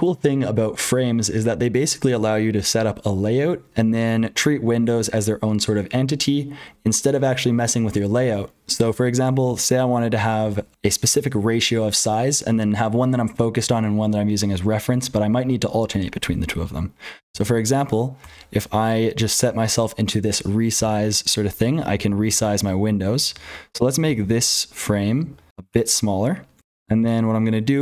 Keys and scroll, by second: 0.0-27.8 typing, 17.2 ctrl+z, 26.5 Return.